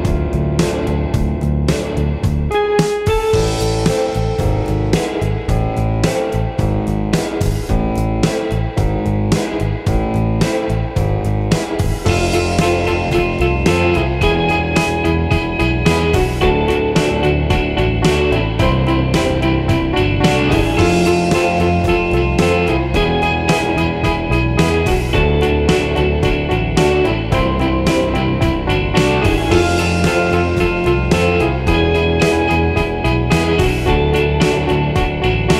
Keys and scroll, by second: 3.3 i, 9.9 super+d, 13.6 d.